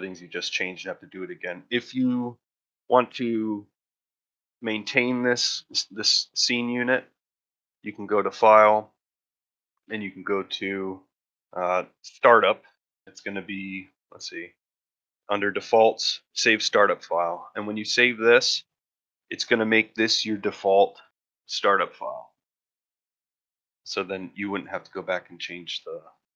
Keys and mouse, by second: 0.0-0.4 shift+middle drag, 18.4 click, 23.6 middle drag, 24.0 shift+middle drag.